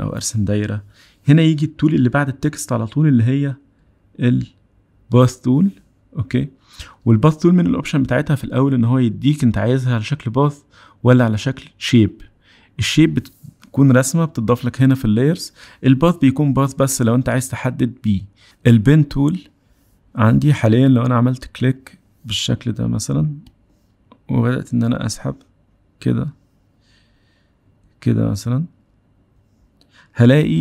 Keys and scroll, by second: 4.6 p.